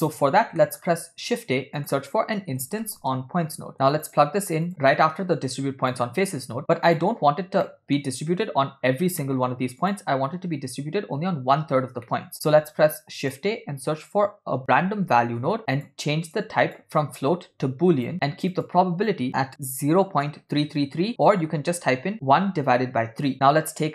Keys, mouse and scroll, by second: 0.0-0.6 scroll down 1, 0.6 middle click, 1.1 shift+a, 4.7 middle click, 5.6 click, 6.4 click, 6.9 drag, 7.7 middle click, 9.2 middle click, 9.8 click, 12.1 middle click, 12.9 shift+a, 16.7-18.1 drag, 18.6-23.3 drag, 20.7-21.9 typing.